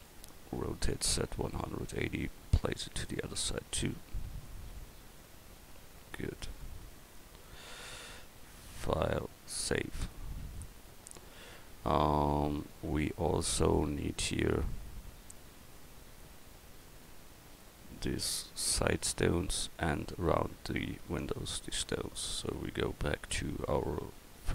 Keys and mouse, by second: 0.9 r, 3.5 click, 4.8-5.8 middle drag, 6.2 a, 15.0-16.1 middle drag, 16.2 middle click, 16.7 middle click.